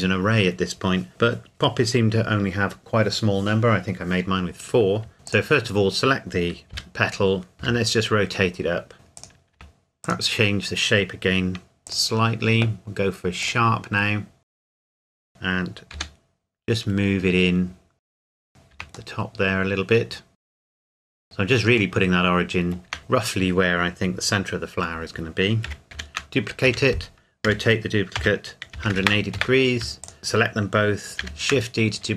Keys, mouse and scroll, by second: 5.1 KP_7, 5.3 click, 6.7 KP_3, 7.6 r, 9.2 click, 9.6 Tab, 10.0 click, 16.0 g, 16.6-18.0 scroll down 1, 18.0 scroll up 1, 18.0 Escape, 18.1 r, 18.2 click, 18.4 g, 18.5 click, 18.7 Tab, 19.1 middle click, 20.5 Tab, 20.7 KP_3, 21.0 g, 21.2 click, 22.0 middle click, 22.8 Tab, 25.6 KP_7, 25.9 shift+d, 26.6 Escape, 27.5 r, 28.2 z, 28.7 KP_1, 28.9 KP_8, 29.3 KP_Enter, 30.0 shift+click, 31.2 shift+d.